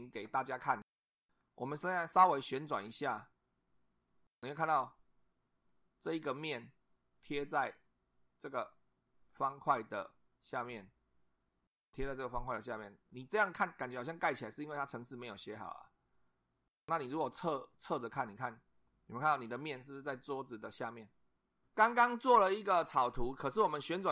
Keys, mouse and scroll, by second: 1.4-4.9 middle drag, 9.3 click, 10.8-13.8 middle drag, 15.0 click, 17.7 click, 23.5-24.1 middle drag.